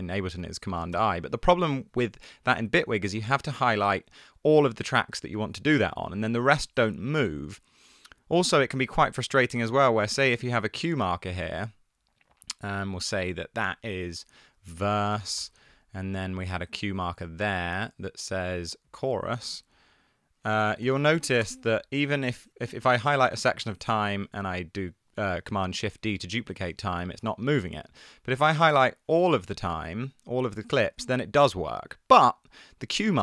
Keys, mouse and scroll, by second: 1.1 shift+super+i, 1.8 super+z, 5.4 shift+super+d, 6.1 super+z, 13.2 super+r, 14.6-15.3 typing, 15.4 Return, 20.6-21.4 typing, 26.2 shift+super+d, 27.1 super+z, 28.5 2, 31.1 shift+super+d.